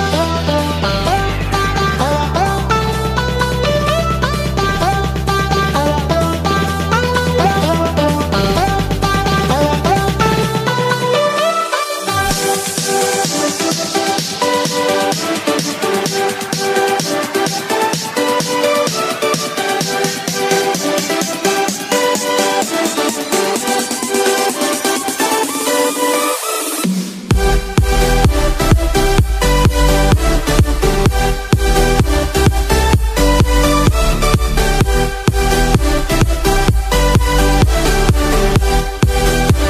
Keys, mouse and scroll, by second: 14.8-15.1 drag, 15.1-15.6 middle drag, 15.6 click, 15.6 middle click.